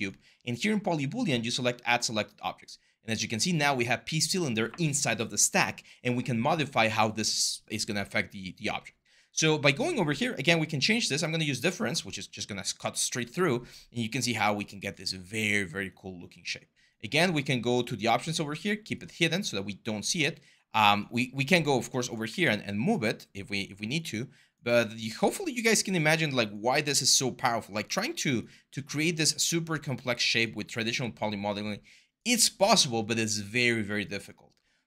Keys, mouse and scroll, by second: 22.0 w, 28.9 r, 30.7 w.